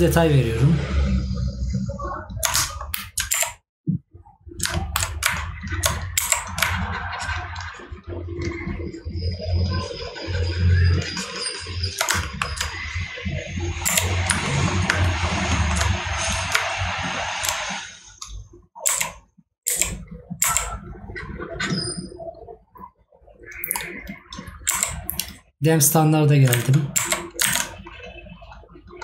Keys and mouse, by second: 2.9 right click, 4.8 right click, 12.3 right click, 15.0 right click.